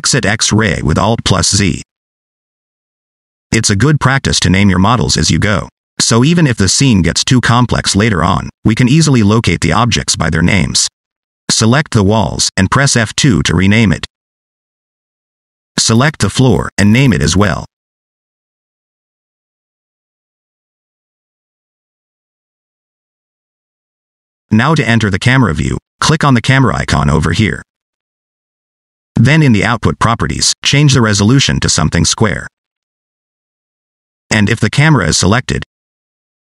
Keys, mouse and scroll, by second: 1.8 alt+z, 3.4-5.8 scroll down 4, 5.8 middle click, 7.0 shift+middle click, 10.6 click, 13.7 F2, 14.7 l, 15.7 click, 16.2 F2, 17.2 o, 24.4-24.9 scroll down 3, 24.9 middle click, 29.1 click, 30.7 click, 31.4 click, 35.5 click.